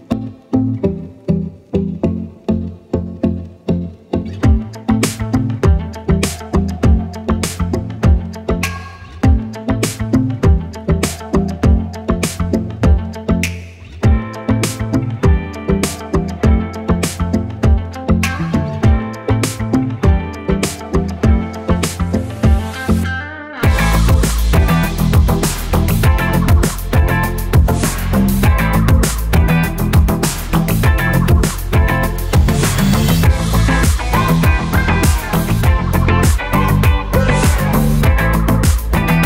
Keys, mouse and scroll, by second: 11.1 alt+click, 15.8 click, 25.6 click, 33.4 click, 37.6 click.